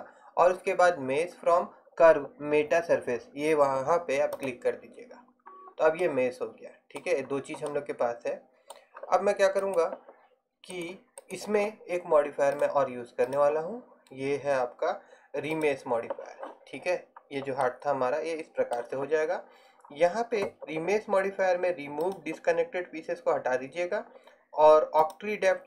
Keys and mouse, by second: 5.6-7.3 middle drag, 10.8-12.6 right drag, 12.6-15.3 middle drag, 17.4 middle click, 22.2-25.6 drag.